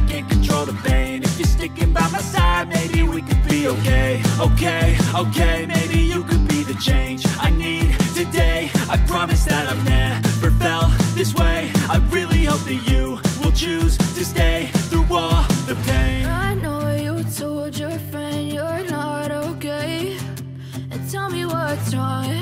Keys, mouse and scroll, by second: 0.5 right click, 2.0 F9, 4.4 F9, 4.5 right click, 7.4 shift+right click, 9.1 ctrl+Tab, 10.6 right click, 13.1 ctrl+p, 18.9 ctrl+Tab, 20.3 ctrl+Tab, 20.3 right click, 20.4 right click, 20.8 right click, 21.3 ctrl+Tab, 22.0 right click.